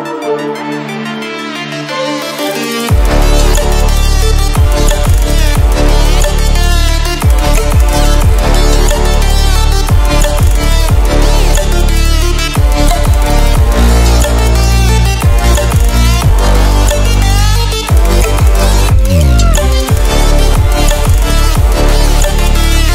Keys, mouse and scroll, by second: 2.7 click, 5.5 click, 8.4 click, 12.0 ctrl+w, 14.0 w, 14.5 click, 15.8 ctrl+w, 16.0 ctrl+w, 18.3 ctrl+w, 21.0 click.